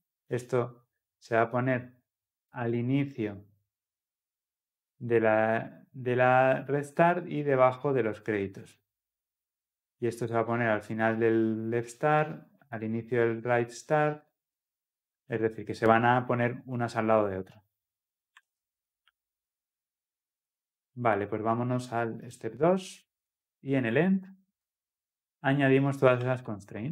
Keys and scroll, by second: 26.5 ctrl+v.